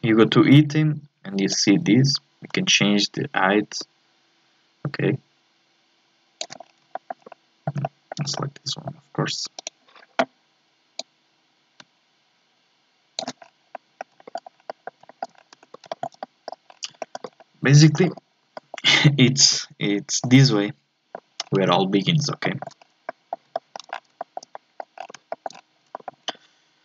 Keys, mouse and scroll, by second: 6.6 scroll down 1, 6.9 shift+middle click, 7.2 scroll up 1, 7.3 middle click, 8.2 scroll up 2, 8.4-9.6 middle drag, 9.6 right click, 11.0-13.4 drag, 13.4 scroll down 3, 13.7 middle click, 14.2-14.7 shift+scroll up 2, 14.3 shift+middle click, 14.7 middle click, 15.4 scroll down 1, 15.5 Tab, 15.9 shift+middle click, 16.7 scroll down 4, 17.0 shift+middle click, 17.3 scroll up 1, 17.4 middle click, 18.3 scroll up 1, 18.6-20.2 shift+middle drag, 20.2 scroll up 1, 20.2-21.4 middle drag, 21.4-22.4 scroll down 3, 22.4 shift+middle click, 22.8 scroll up 3, 23.1 middle click, 23.9 scroll down 4, 24.2 scroll up 1, 24.2 shift+middle click, 25.0-25.3 scroll up 4, 25.3 shift+middle click, 25.5-25.9 scroll down 4, 25.9-26.8 shift+middle drag.